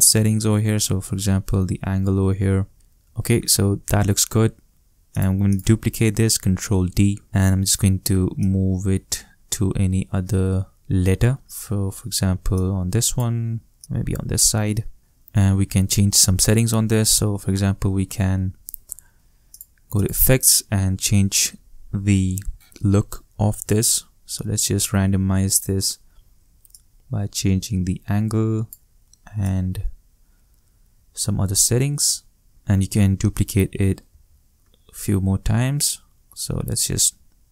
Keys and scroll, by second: 3.0 shift+space, 6.4 shift+super+d, 34.1 shift+super+d.